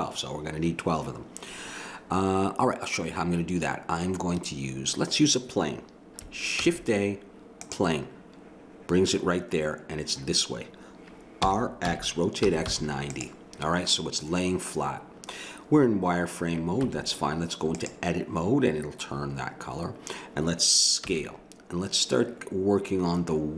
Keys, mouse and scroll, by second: 6.6 shift+a, 11.4 r, 16.8 Tab, 21.1 s.